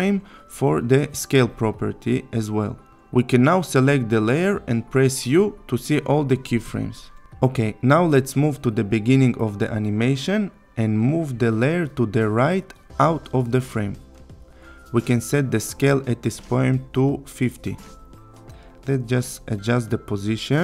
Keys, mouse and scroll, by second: 5.3 u, 8.2-9.8 click, 14.7 click, 18.3 click.